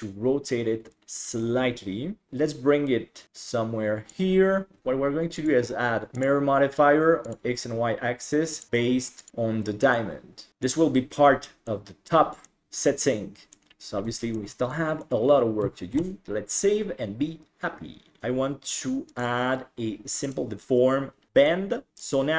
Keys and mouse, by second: 2.3-4.3 drag, 2.3 KP_1, 5.5-6.5 drag, 8.0 click, 8.6 click, 10.0-10.5 middle drag, 11.7-12.5 middle drag, 12.6-13.6 middle drag, 14.4 shift+middle click, 14.8-15.3 middle drag, 16.1 ctrl+s, 19.2-20.3 drag, 21.5-22.0 middle drag.